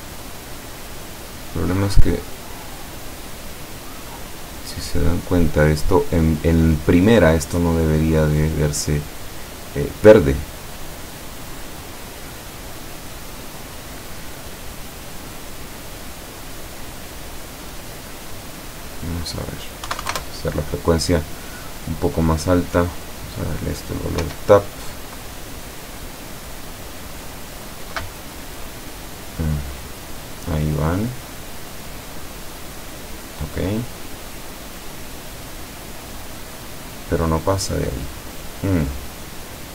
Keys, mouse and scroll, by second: 0.2 click, 0.7 click, 3.6 right click, 4.9-5.8 scroll down 2, 6.0-6.9 scroll up 2, 14.2 right click, 15.9-17.2 middle drag, 17.7 click, 18.9 click, 19.9 KP_1, 20.1 KP_0, 20.2 KP_Enter, 23.2 click, 24.3 p.